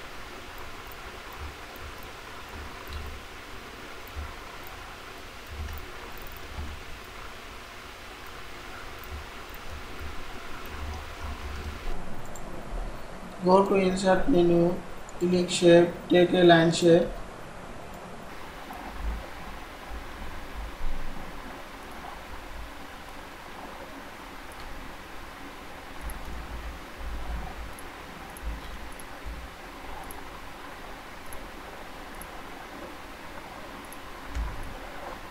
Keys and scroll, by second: 5.6 ctrl+c, 6.6 ctrl+v, 11.0 ctrl+Down, 19.4 ctrl+Left, 20.1 ctrl+Right, 27.3 ctrl+z.